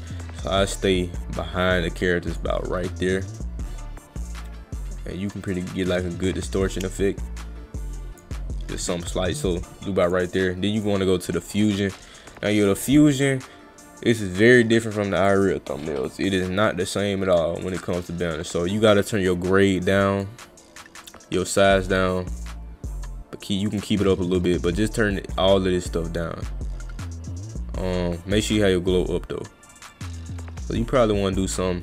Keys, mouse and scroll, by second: 3.4-8.2 drag, 10.1 click, 10.8 click, 14.1-15.3 drag, 17.8-20.2 drag, 21.1 click, 22.0-23.2 drag, 23.8 click, 24.9-26.2 drag, 27.8 click, 29.9-31.4 drag.